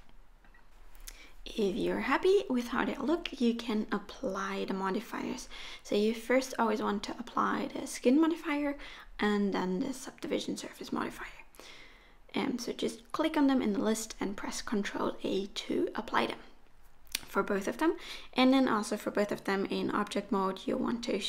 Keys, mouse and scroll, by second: 1.5 middle click, 2.0 scroll up 1, 2.3 KP_3, 2.7 click, 3.0 g, 3.4 middle click, 3.7 click, 3.8 g, 4.2-4.7 scroll down 4, 4.4 middle click, 4.6 Tab, 4.7 middle click, 5.1 click, 5.4 middle click, 6.2-6.5 scroll down 1, 6.5 middle click, 8.3-9.2 scroll up 2, 9.4 ctrl+z, 10.6 click, 11.3 ctrl+a, 12.1 click, 12.5 ctrl+a, 13.4 click, 14.5 click, 14.8 ctrl+a, 15.6 click, 15.8 ctrl+a, 16.3 middle click, 17.2 right click, 18.5 right click, 19.3 middle click, 20.1 click, 20.6 right click.